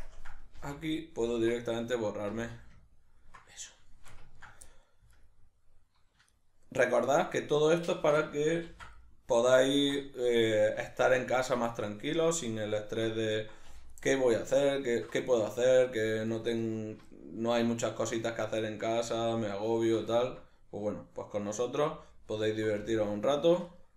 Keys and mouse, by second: 0.0 ctrl+KP_Add, 0.5 x, 2.9-5.1 ctrl+middle drag, 5.1 alt+right click, 6.3 alt+shift+right click, 6.9 alt+shift+right click, 7.5 alt+shift+right click, 7.8 alt+shift+right click, 8.7 ctrl+x, 9.0-14.0 middle drag, 14.0 alt+right click, 14.7 alt+shift+right click, 16.3 alt+shift+right click, 16.6 alt+shift+right click, 17.2-19.7 middle drag, 19.7 alt+right click, 20.2-22.1 ctrl+middle drag, 22.1 alt+right click, 23.7 alt+shift+right click.